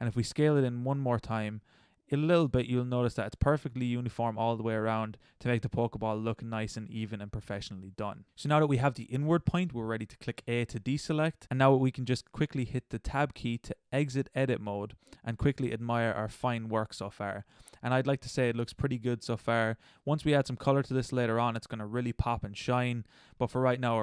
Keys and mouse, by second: 0.4 s, 6.3-10.4 middle drag, 10.4 a, 16.8-18.5 middle drag, 19.1 middle click, 19.6-20.7 middle drag, 22.0-22.5 middle drag.